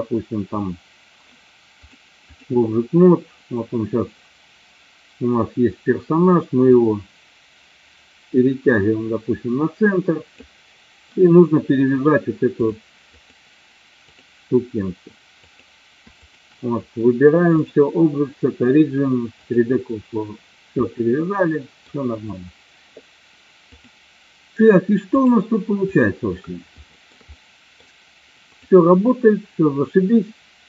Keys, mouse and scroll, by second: 2.1 click, 6.9-10.8 drag, 13.3-14.3 drag, 16.4 shift+click, 17.6-19.8 drag, 20.9 middle click, 23.9 click, 25.3 click, 26.8 shift+middle click, 27.4 middle click, 28.6 click.